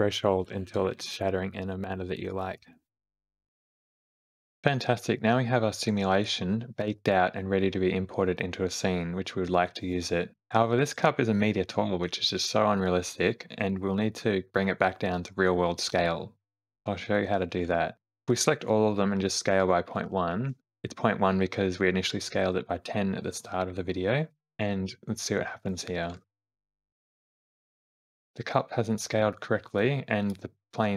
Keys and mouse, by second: 0.5 shift+Left, 0.5 space, 0.6 space, 1.7 shift+middle click, 1.9 shift+click, 19.5 s, 25.9 space, 26.6 space, 26.9 Home, 27.9 space, 30.0 click.